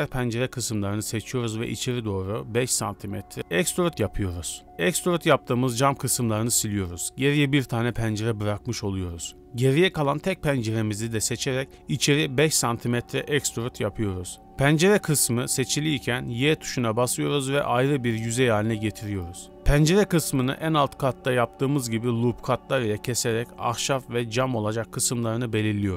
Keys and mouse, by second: 0.5 click, 1.2 click, 1.6-3.0 drag, 5.2 middle click, 5.6 middle click, 6.7 middle click, 7.1 click, 7.7 click, 8.9 ctrl+z, 8.9 e, 12.6 click, 14.4 y, 14.8 click, 15.4 shift+middle click, 15.7 middle click, 16.1 ctrl+r, 18.5 ctrl+r, 22.7 ctrl+r.